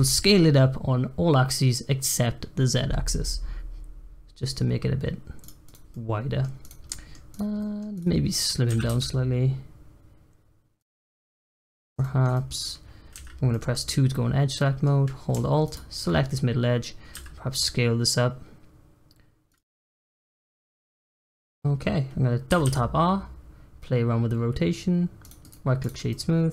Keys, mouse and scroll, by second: 5.6 click, 5.8-6.6 middle drag, 6.6 click, 6.8-7.3 middle drag, 7.3 click, 7.6 middle click, 7.9 click, 8.6 s, 11.0 Tab, 11.3 middle click, 11.6-12.0 scroll up 1, 12.0-13.1 shift+middle drag, 13.1 2, 13.5-15.6 middle drag, 15.6 alt+click, 17.1 s, 19.6 Tab, 19.8-22.5 middle drag, 22.5 r, 25.3-26.1 right drag, 26.1 middle click.